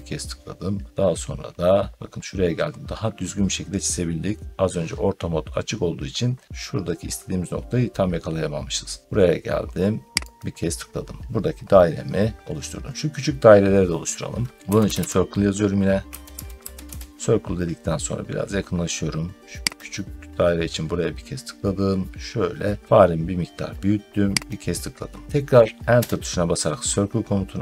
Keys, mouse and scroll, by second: 10.2 click, 14.3-16.5 typing, 16.7 Return, 17.9 middle click, 19.6 click, 24.3 click, 25.8 Return.